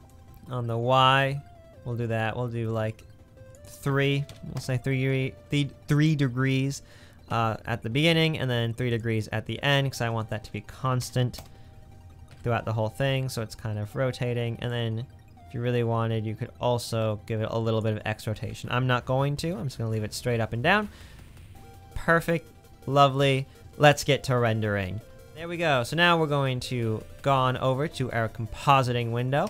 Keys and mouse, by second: 12.6 space, 14.3 space, 19.1 space, 25.0 space.